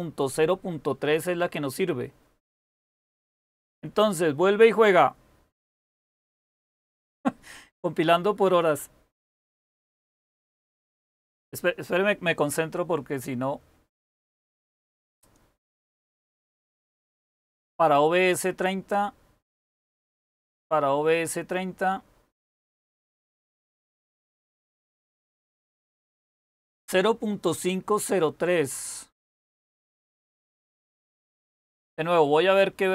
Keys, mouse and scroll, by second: 2.5-4.8 scroll down 1, 4.8-6.1 scroll down 1, 6.1-7.3 scroll down 1, 7.3-7.9 scroll down 1, 7.9-9.6 scroll down 1, 9.6-10.4 scroll down 1, 10.4-11.5 scroll down 1, 11.5-12.3 scroll down 1, 12.3-14.5 scroll down 1, 14.5-17.4 scroll down 1, 17.4-18.5 scroll down 1, 18.5-19.5 scroll down 1, 19.5-20.7 scroll down 1, 20.7-21.5 scroll down 1, 21.5-22.3 scroll down 1, 22.3-23.4 scroll down 1, 23.4-25.3 scroll down 1, 25.3-28.3 scroll down 1, 28.3-29.0 scroll down 1, 29.0-32.9 scroll down 1.